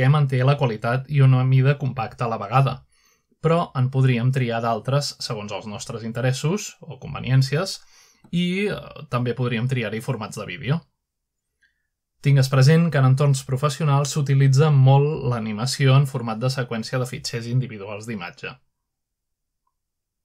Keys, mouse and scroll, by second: 0.0 click, 0.8 click, 1.9 click, 3.7 click, 5.6 click, 7.2-7.8 scroll down 1, 8.5 click, 9.0-9.6 scroll down 2, 9.9-10.3 scroll down 1, 11.8-12.7 drag, 12.9-13.5 drag, 14.5 click, 16.5 click, 17.7 click.